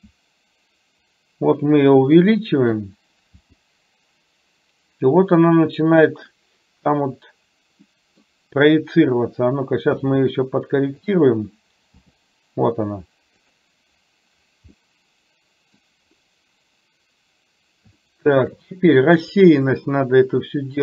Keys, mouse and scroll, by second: 0.1 s, 3.5 g, 7.9-8.4 middle drag, 10.0 s, 12.1 g, 14.9-16.0 middle drag, 18.1-18.8 shift+middle drag.